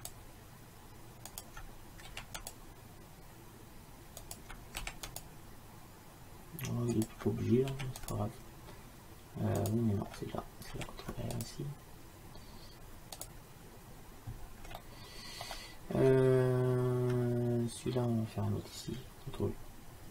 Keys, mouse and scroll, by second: 2.1 ctrl+r, 4.9 ctrl+r, 7.8 ctrl+r, 10.8 ctrl+r, 14.9-18.9 middle drag.